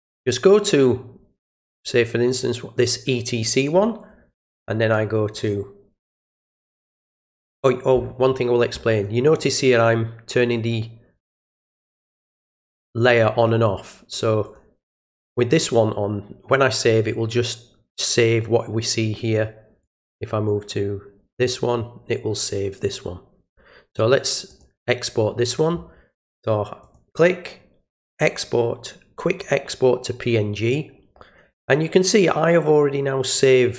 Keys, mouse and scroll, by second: 0.0 alt+click, 1.3 click, 5.3 alt+click, 8.9 click, 10.3 alt+click, 11.3 alt+click, 12.6 alt+click, 13.6 alt+click, 14.4 alt+click, 15.0 click, 19.8 click, 21.4 click, 24.4 click, 26.8 click, 28.0 click, 29.2 click.